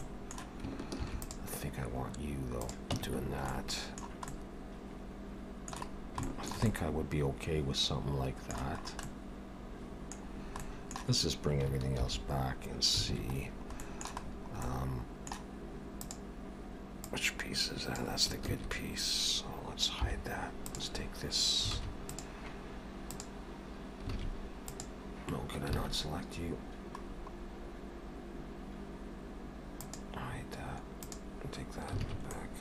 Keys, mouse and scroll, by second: 0.0 middle click, 0.9 ctrl+r, 3.0 Tab, 3.2 scroll down 4, 3.5 middle click, 4.3 middle click, 6.0 scroll down 1, 6.3 shift+middle click, 6.4 shift+middle click, 6.7 middle click, 8.8 scroll up 2, 9.0 middle click, 10.3-10.6 scroll down 2, 10.6 middle click, 12.0 alt+h, 13.1 alt+a, 13.4-13.8 scroll down 4, 13.8 middle click, 14.3-14.6 scroll down 2, 14.7 middle click, 16.0 click, 17.1 click, 18.5 ctrl+z, 20.0 h, 20.7 click, 21.8 alt+a, 22.1 click, 23.0 click, 24.2 alt+a, 24.7 click, 25.8 alt+a, 27.0-27.7 scroll down 2, 27.7 scroll down 3, 29.9 click, 31.1 click, 32.1 alt+a, 32.3 middle click.